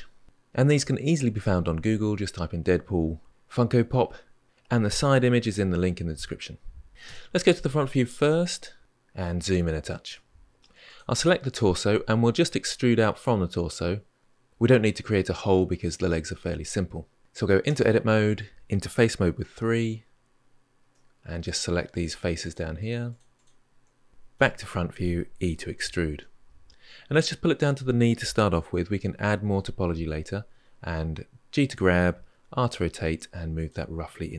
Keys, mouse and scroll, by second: 6.9 KP_1, 8.8-9.9 scroll up 6, 9.9-10.6 shift+middle drag, 10.6 click, 17.5 Tab, 19.4 3, 20.7-21.7 middle drag, 21.7 click, 22.2 shift+click, 22.6 shift+click, 22.9 shift+click, 23.1 shift+click, 24.1 middle click, 24.1 KP_1, 25.9 e, 30.3 g, 32.1 r.